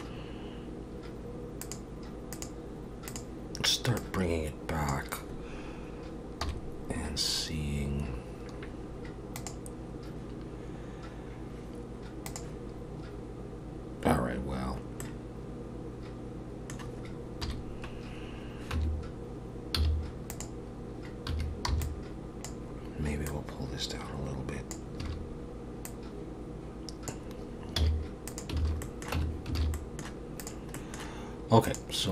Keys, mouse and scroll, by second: 1.6 click, 4.0 click, 6.4 KP_1, 15.0 middle click, 17.4 KP_1, 18.8 Tab, 19.8 z, 21.3 1, 21.7 b, 23.3 click, 25.0 a, 25.8 click, 27.8 z, 28.6 alt+a, 28.8 middle click, 29.2 Tab, 29.6 alt+a, 29.7 middle click, 30.4 click, 30.7 middle click, 31.6 click.